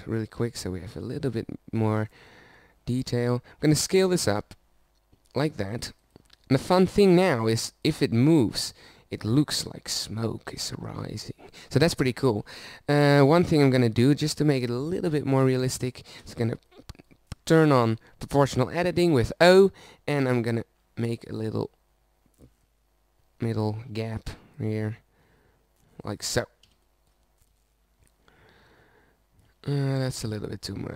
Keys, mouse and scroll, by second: 0.2 middle click, 0.5 Tab, 0.9 middle click, 3.2 s, 6.9 right click, 8.8-12.5 middle drag, 13.0 Tab, 14.7-16.3 middle drag, 17.2 o, 20.6 middle click, 25.6-27.3 drag, 27.8 Tab, 30.6 Tab.